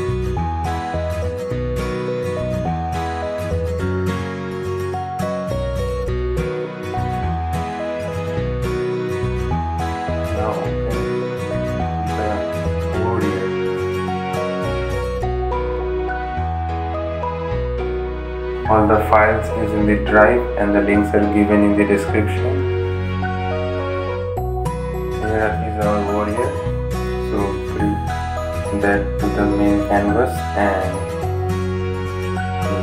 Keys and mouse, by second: 4.0 click, 13.1 click, 16.9 click, 19.2 ctrl+z, 21.1 right click, 21.8-31.3 drag, 31.3 ctrl+t, 31.8-32.8 drag.